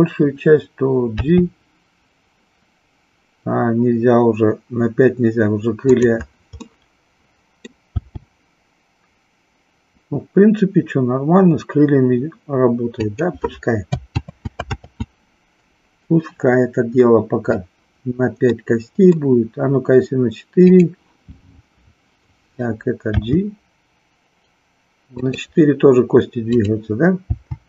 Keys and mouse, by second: 1.2 g, 5.9 click, 6.8-7.8 middle drag, 7.9 g, 13.2 click, 14.2 ctrl+z, 14.7 ctrl+z, 18.5-19.1 middle drag, 20.5 click, 23.1 g, 26.7 click, 27.3 g.